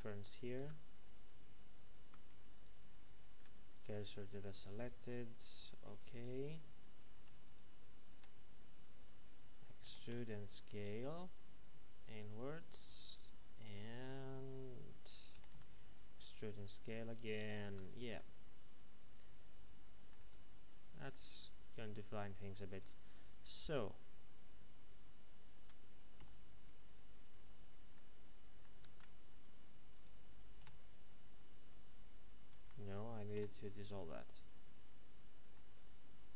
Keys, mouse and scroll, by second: 0.6 Escape, 1.4 ctrl+z, 2.5 right click, 3.2 shift+s, 4.4 click, 7.4 alt+shift+right click, 9.8-10.1 typing, 14.9 click, 15.3 e, 15.5 s, 17.3 click, 17.6 Tab, 18.1 middle click, 20.2 Tab, 20.7-21.1 scroll up 1, 21.1 middle click, 22.7 right click, 23.4 shift+right click, 26.1 j, 27.9 middle click, 29.0 ctrl+Tab, 29.4 click, 29.9 right click, 30.6 x, 31.3 click, 32.6 ctrl+z, 34.7 click, 35.5 middle click.